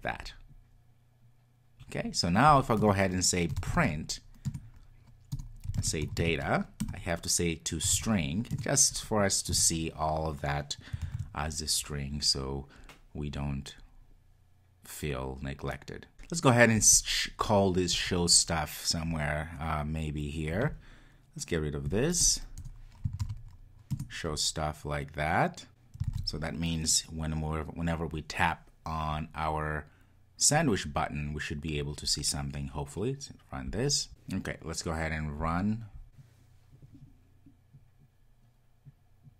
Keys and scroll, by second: 4.5 Return, 11.1 super+s, 23.9 Return, 26.3 super+s, 33.8 ctrl+r, 34.1 super+F2, 35.4 ctrl+r.